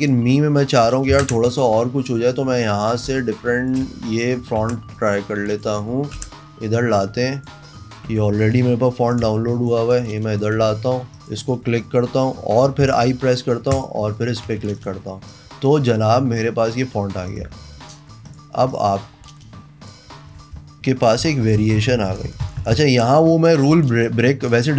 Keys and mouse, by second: 0.0 click, 0.2 click, 1.3 ctrl+KP_Enter, 2.5 click, 3.3 space, 3.4 click, 4.0 a, 4.2 click, 4.8 ctrl+c, 5.3 click, 5.7 click, 6.4 ctrl+v, 6.9 click, 7.1 click, 7.4 click, 8.3 v, 9.3 click, 10.3 click, 10.8 a, 11.3 click, 13.0 i, 13.9 click, 14.7 a, 14.9 click, 16.9 click, 17.5 shift+click, 18.5 click, 18.9-20.1 drag, 21.4 ctrl+shift+,, 21.6 ctrl+shift+,, 21.8 ctrl+shift+,, 22.0 ctrl+shift+,, 22.2 ctrl+shift+,, 22.5 ctrl+shift+,, 22.6 ctrl+shift+,, 22.8 ctrl+shift+,, 23.0 ctrl+shift+,, 23.9 v, 24.2-24.7 drag.